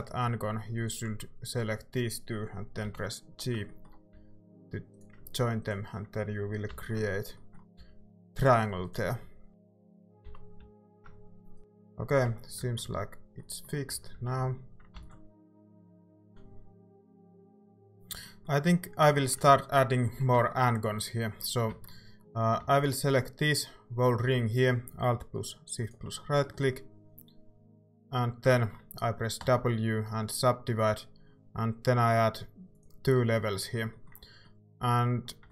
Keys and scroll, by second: 2.9 j, 4.1 a, 6.7 j, 7.8 a, 9.2-10.3 typing, 11.6-15.6 typing, 12.6 Tab, 15.0 ctrl+s, 16.2 ctrl+s, 17.7 ctrl+z, 17.7 Tab, 17.7 ctrl+s, 21.7 Tab, 24.3 a, 29.4 w.